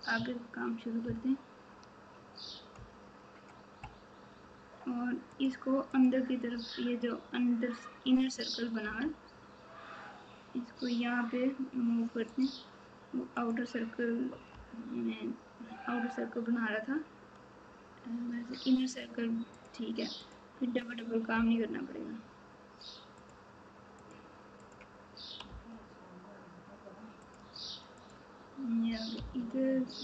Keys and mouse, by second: 1.0 ctrl+KP_6, 1.5 ctrl+KP_6, 13.3 click, 20.2 click, 24.0 click, 29.1 g.